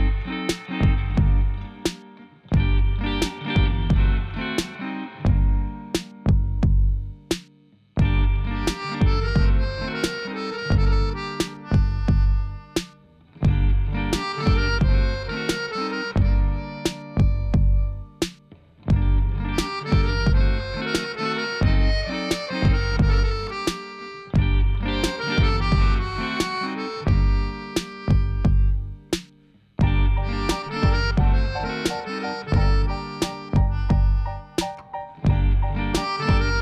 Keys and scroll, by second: 6.0 3, 6.8 Tab, 7.3 shift+z, 13.9 g, 15.0 z.